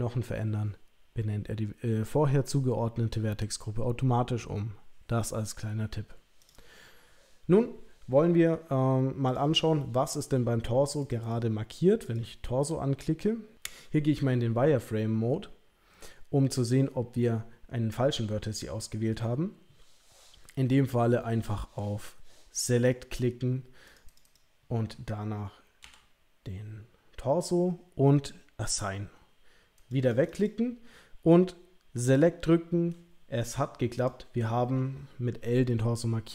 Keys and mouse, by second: 9.3 click, 11.2 click, 12.0 click, 22.7 click, 24.1 click, 24.2 click, 25.8 l, 28.6 click, 30.0 click, 30.4 click, 32.1 click.